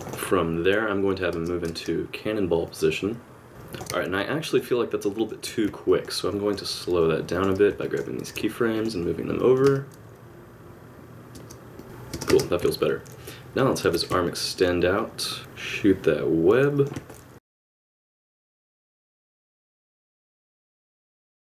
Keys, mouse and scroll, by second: 1.3 space, 1.6 space, 2.7 click, 3.7 click, 4.5 shift+click, 5.9 middle click, 6.9 g, 7.7 b, 8.2 g, 9.4 click, 9.6 space, 11.3 space, 11.8 click, 11.8 space, 12.6 space, 12.8 middle click, 13.8 alt+r, 14.2 middle click, 15.4 click, 17.1 middle click, 17.4 alt+r, 17.5 click, 17.6 middle click, 17.9 middle click, 18.3-21.4 typing, 18.5 middle click, 18.6 click, 18.7 middle click, 19.1 middle click, 20.2 middle click, 20.8 click, 21.1 middle click, 21.2 middle click.